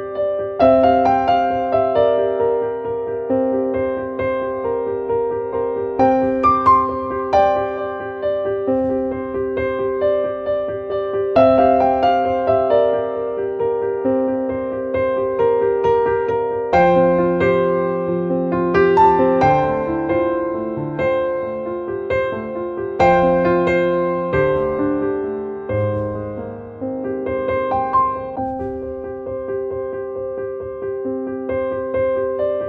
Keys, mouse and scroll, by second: 2.9 click, 3.8 click, 12.4 click, 12.9 click, 24.2 click.